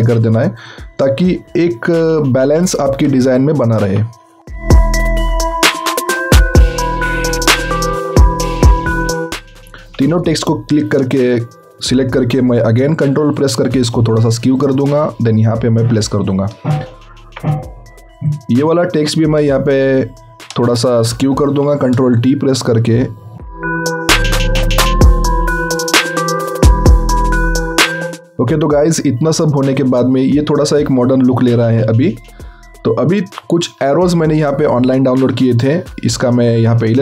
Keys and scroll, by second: 6.0 BackSpace, 7.0 ctrl+v, 7.1 ctrl+a, 7.7 BackSpace, 9.8 ctrl+t, 21.5 ctrl+t, 24.8 z.